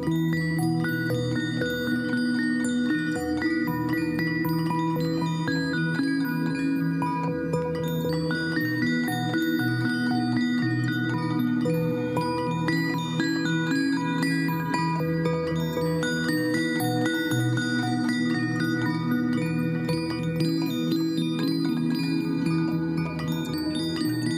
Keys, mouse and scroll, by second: 17.4 Caps_Lock, 18.4-21.8 typing, 24.1 ctrl+a.